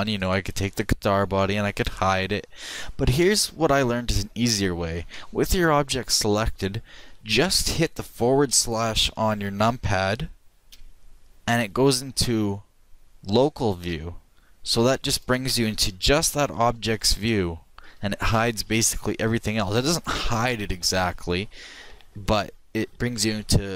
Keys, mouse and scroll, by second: 0.2-1.9 right drag, 1.9 h, 3.3 ctrl+z, 4.6 ctrl+z, 10.7 KP_Divide, 15.6-19.0 middle drag.